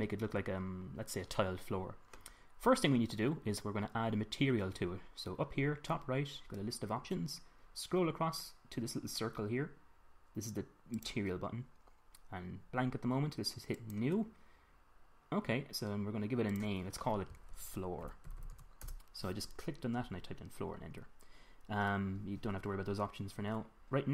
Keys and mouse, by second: 11.3-16.0 drag, 16.9 click, 18.8 o.